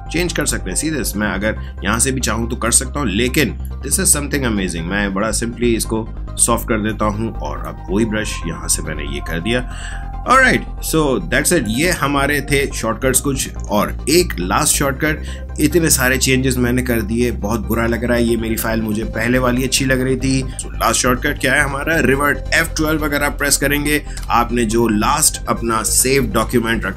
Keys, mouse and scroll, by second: 0.4 right click, 2.6 click, 3.6 alt+right click, 7.6-14.0 drag, 24.1 F12.